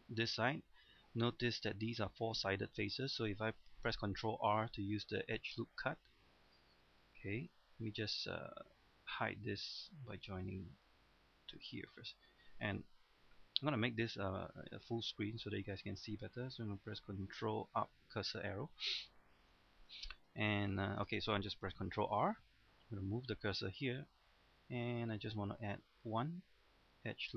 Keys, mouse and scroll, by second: 1.0 scroll up 1, 1.4 shift+middle click, 6.1 click, 7.1 shift+middle click, 7.5-8.8 scroll down 1, 9.5 right click, 10.7 click, 12.1-15.2 scroll down 1, 15.6-17.4 scroll up 1, 18.0 ctrl+Up, 19.0-19.5 scroll up 1, 19.6 shift+middle click, 20.9 shift+middle click, 21.9 ctrl+r, 26.0 click.